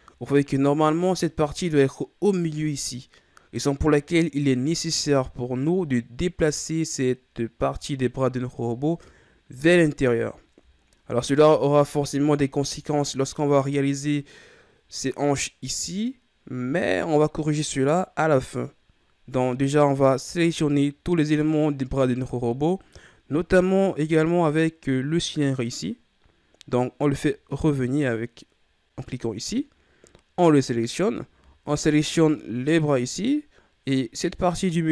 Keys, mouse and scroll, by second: 6.5 right click, 7.8-9.8 scroll down 8, 10.8-12.8 ctrl+scroll up 1, 12.8-14.8 ctrl+scroll down 4, 20.1-22.7 ctrl+scroll up 3, 22.7 right click, 27.5 click, 30.3 right click, 32.6 shift+right click, 34.4 shift+right click.